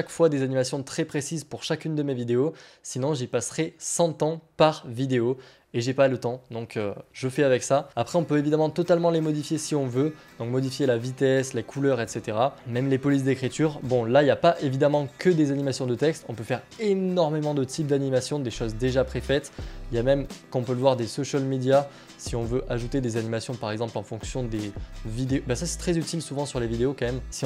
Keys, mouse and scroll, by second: 15.1 middle click, 21.1 click, 22.3-23.5 scroll down 7, 25.3-27.2 scroll down 7, 27.2-27.4 scroll down 1.